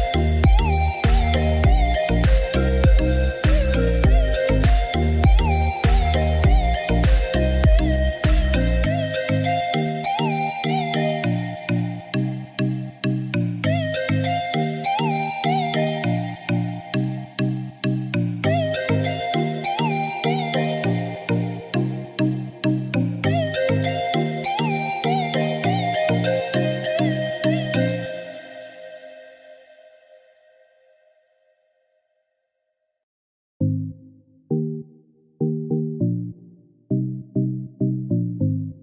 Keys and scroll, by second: 6.4-7.3 typing, 14.7-15.6 typing, 15.8 Return, 22.1 2, 22.5 5, 23.0 Return, 26.6 Escape.